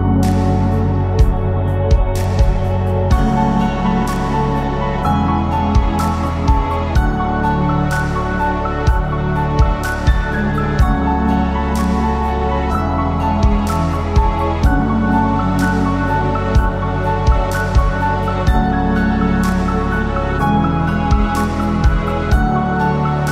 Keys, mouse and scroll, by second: 0.2 middle click, 0.4 Tab, 0.7 click, 0.8 Tab, 1.1 middle click, 1.3-1.9 scroll up 3, 1.9 click, 2.6 shift+click, 3.1 shift+middle click, 3.8 shift+click, 4.4 shift+click, 4.9 x, 6.5 click, 6.9-7.2 scroll down 2, 7.2 shift+click, 7.4 shift+click, 7.7 middle click, 8.0-8.4 scroll up 1, 8.4 middle click, 9.0 click, 10.9 ctrl+r, 12.5 ctrl+r, 13.2 right click, 14.6 click, 14.9 shift+click, 15.2 shift+click, 15.4 shift+click, 15.8 click, 16.4 f, 16.8 click, 17.2 shift+click, 17.8-19.6 typing, 20.5 ctrl+r, 21.5 middle click, 22.2 shift+middle click, 22.4 scroll up 1, 22.6 a, 23.1 g.